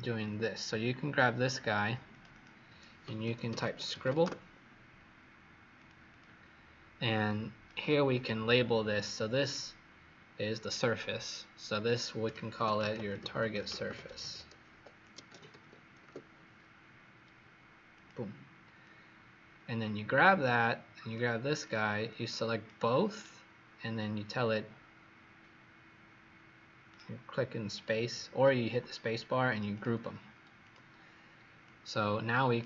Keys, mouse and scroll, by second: 0.2 click, 2.0 click, 2.2 click, 2.7-4.4 typing, 5.7 click, 6.0 click, 7.2 click, 12.3-15.9 typing, 17.8 click, 22.0 click, 23.1 right click, 29.6 click.